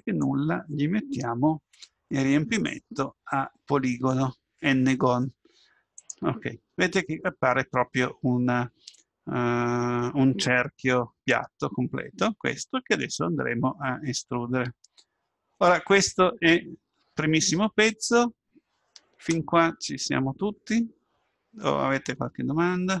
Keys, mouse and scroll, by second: 0.0-1.8 drag, 11.9-16.6 middle drag.